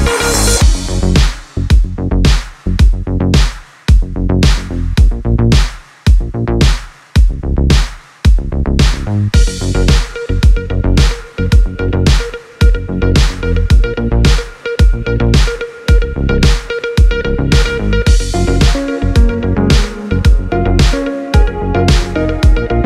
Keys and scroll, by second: 10.6 space, 16.0 space.